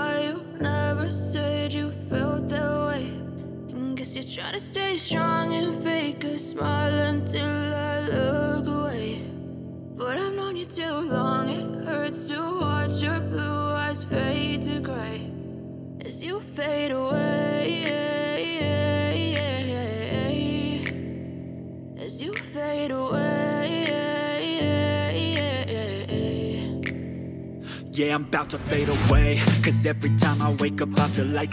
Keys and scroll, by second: 4.1 y, 18.6 space.